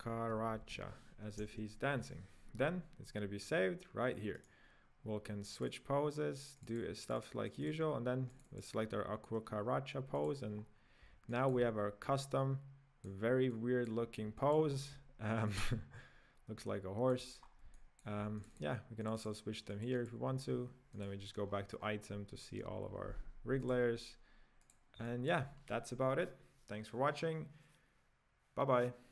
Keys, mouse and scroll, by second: 0.3 a, 4.5-5.5 right drag, 5.5 click, 5.8 click, 6.5 click, 6.9 click, 7.0 click, 7.3 click, 7.5 click, 7.8 drag, 8.3 click, 8.6 click, 9.1 scroll up 1, 10.1 click, 10.6-11.3 scroll down 1, 11.3 shift+middle click, 11.8-12.2 scroll up 3, 12.2-14.7 middle drag, 14.7-15.5 scroll down 3, 15.5-17.4 middle drag, 17.4-17.7 scroll up 3, 17.7-18.4 middle drag, 18.4 click, 19.0 click, 19.7 click, 20.9 click, 21.4-21.9 scroll down 10, 22.6 n, 23.1-23.6 scroll down 1, 23.6 click, 24.6 click, 25.1-28.2 shift+middle drag.